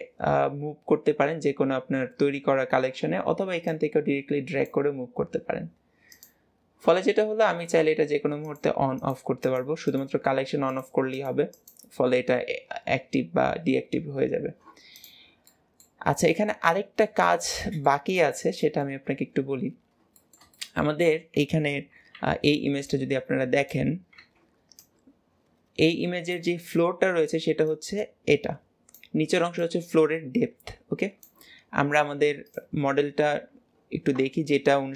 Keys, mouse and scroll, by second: 3.6 click, 6.0 click, 6.9-8.3 middle drag, 8.3 click, 8.9 click, 9.3 click, 9.7 click, 10.5 click, 11.0 click, 11.4 click, 14.8 click, 15.3 middle click, 16.1 click, 16.5-17.9 middle drag, 17.9-18.5 scroll up 3, 18.5-19.1 shift+middle drag, 19.1 scroll up 2, 19.7-20.1 scroll down 2, 20.1-22.0 shift+middle drag, 22.0 2, 22.7 click.